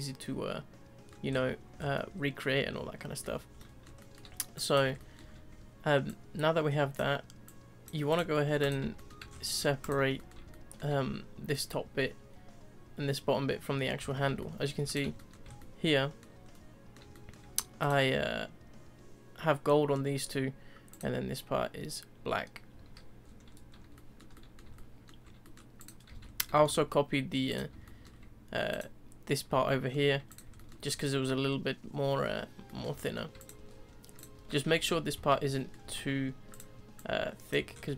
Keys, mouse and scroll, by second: 1.3-1.9 scroll up 3, 1.9-3.2 middle drag, 3.2-3.6 scroll down 2, 3.6-4.2 middle drag, 4.2-4.5 scroll down 3, 4.5 click, 5.0-5.3 shift+middle drag, 5.3 scroll down 3, 6.0 ctrl+click, 7.4 ctrl+click, 8.1 ctrl+click, 8.6 click, 8.9-9.3 shift+middle drag, 9.3-9.8 scroll up 6, 9.8 click, 10.1-13.5 middle drag, 13.7 scroll down 3, 14.0 z, 14.4 shift+middle click, 14.8 click, 15.1-15.4 shift+middle drag, 15.4 scroll up 2, 15.6-16.5 middle drag, 16.5 scroll up 1, 16.5-17.8 middle drag, 17.8 click, 20.9 click, 22.7 z, 23.2-23.7 scroll down 4, 23.7 scroll up 1, 23.9-25.2 shift+middle drag, 25.2 scroll down 2, 25.4-25.8 middle drag, 25.8 click, 26.1 z, 26.4-27.5 shift+middle drag, 27.5 click, 27.8-28.7 shift+middle drag, 28.7 click, 29.6-30.3 shift+middle drag, 30.3 click, 30.5-30.8 shift+middle drag, 30.8-32.3 scroll up 1, 32.3-32.6 scroll down 1, 32.6-33.4 middle drag, 33.4 click, 33.7-34.1 scroll down 2, 34.1 click, 34.4 scroll up 2, 34.7 Tab, 35.1 z, 35.5 scroll up 1, 35.5 middle click, 35.8 3, 36.5 click, 36.9 drag, 37.7 scroll up 1.